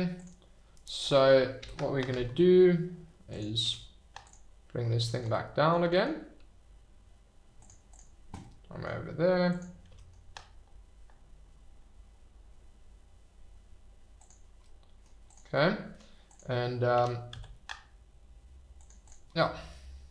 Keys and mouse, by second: 0.2 click, 1.6 alt+h, 3.3 click, 3.6 h, 5.3-5.7 middle drag, 5.8 g, 5.9 middle click, 7.6 click, 7.8 click, 8.4-8.8 middle drag, 9.9 g, 9.9 middle click, 14.2 click, 14.8-15.1 middle drag, 15.2 click, 15.5-15.9 middle drag, 16.2 click, 16.9 r, 17.3 z, 18.7 click, 19.3-20.1 middle drag.